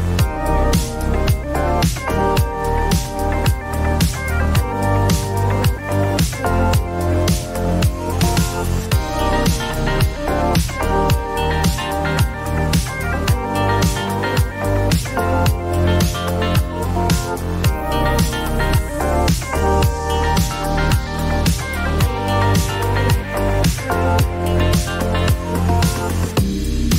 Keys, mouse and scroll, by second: 1.8 click, 6.4 click, 7.1 right click, 7.9 click, 8.4-9.7 typing, 10.3 click, 11.5 click, 12.8 click, 13.7 click, 14.6 right click, 17.3-20.2 typing, 21.5 click, 21.8 click, 23.1 click, 23.7 click, 23.9-26.8 typing.